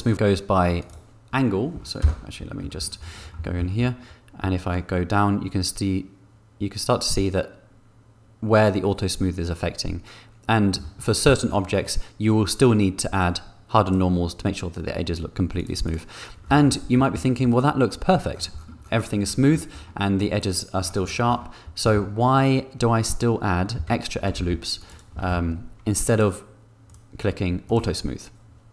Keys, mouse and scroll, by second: 0.0 click, 2.0 KP_0, 3.4 shift+middle click, 4.7-10.7 shift+middle drag, 13.8 click, 15.5 click, 15.8 click, 16.4 middle click, 21.8 shift+middle click, 24.0 Tab, 24.5 ctrl+r, 24.8 click, 25.2 ctrl+b, 26.1 click, 26.8 click, 27.6 click.